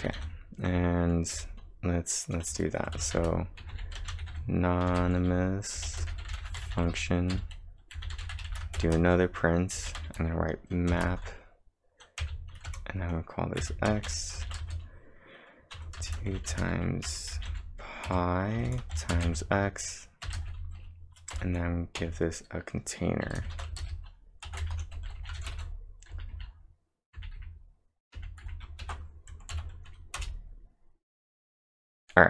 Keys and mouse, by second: 2.5 Return, 3.0-9.8 typing, 10.9 shift+(, 12.0-12.7 typing, 14.1 -, 14.1 space, 14.5 shift+>, 14.6 space, 15.8-23.6 typing, 18.1 Tab, 24.8-25.5 typing, 26.9-28.4 typing, 28.8 ctrl+`, 29.6 Up, 30.2 Return.